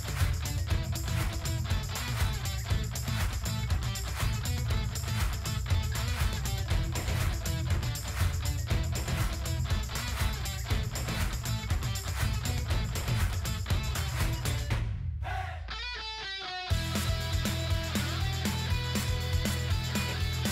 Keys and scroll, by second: 11.1 shift+b, 11.7 shift+b, 11.9 shift+b, 15.0 shift+c, 18.9 shift+s.